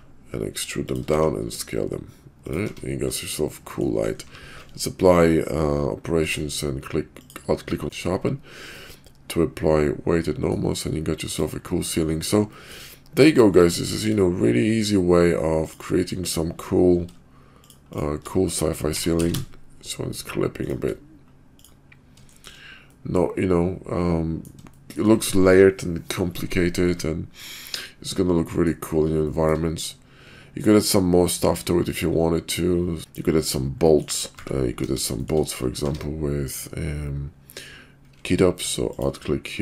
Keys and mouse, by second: 1.0 s, 2.6 Tab, 3.5-3.9 middle drag, 4.3 q, 7.8 shift+middle click, 7.8 shift+/, 8.8-10.5 middle drag, 11.9 middle click, 12.5 shift+middle drag, 13.7 shift+middle drag, 15.5 click, 18.7 g, 21.5 click, 22.3 shift+click, 22.8-24.5 middle drag, 27.4-28.7 middle drag, 29.2 shift+middle drag, 29.7-33.2 middle drag, 33.8 middle drag, 34.3 `, 34.8 KP_5, 35.2 shift+middle click, 35.8 q.